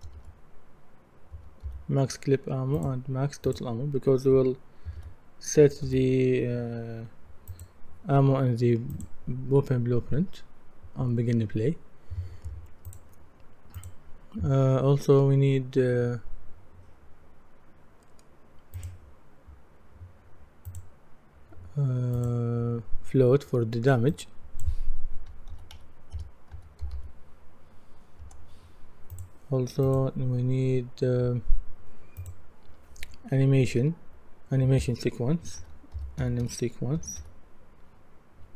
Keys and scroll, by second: 0.0 shift+m, 1.3-1.6 typing, 4.8-5.8 typing, 25.3-27.4 typing, 28.2 Return, 35.4-37.7 typing.